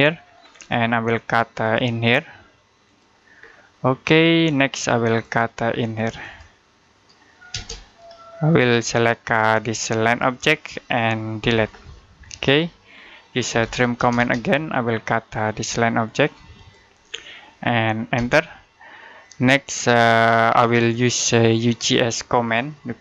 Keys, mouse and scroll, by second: 0.2-1.5 scroll up 1, 1.5 click, 3.2-3.7 scroll down 1, 3.7 middle click, 4.9 click, 7.4 space, 8.5 click, 11.2 Delete, 12.0-12.4 scroll down 1, 12.4 middle click, 13.1-14.0 typing, 14.4-16.2 scroll up 1, 16.4 click, 16.9-17.2 scroll down 1, 17.2 middle click, 18.0 space, 20.0 middle click, 21.2 scroll up 1.